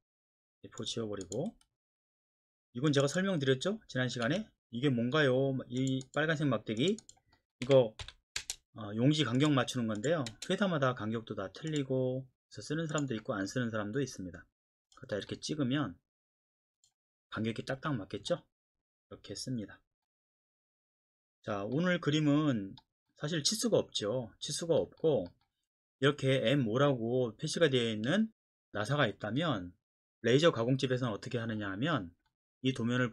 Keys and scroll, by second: 1.5 Delete, 4.3 Escape, 7.6-10.3 typing, 17.7 Escape.